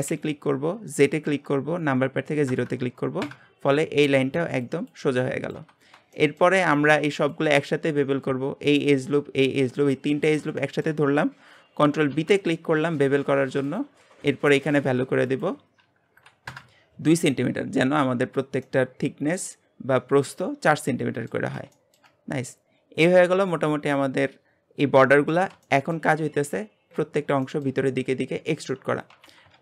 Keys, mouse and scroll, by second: 0.1 s, 5.7 scroll down 2, 6.1-7.1 shift+middle drag, 7.1 alt+shift+click, 8.6 alt+shift+click, 10.6-12.1 shift+middle drag, 12.1 ctrl+b, 15.3-18.3 drag, 18.6-22.1 middle drag, 22.1-22.5 scroll down 2, 22.5-26.3 middle drag, 26.3-26.9 scroll down 2, 26.9 shift+middle click, 27.1-27.4 scroll up 1, 27.4-29.1 shift+middle drag, 29.1 a.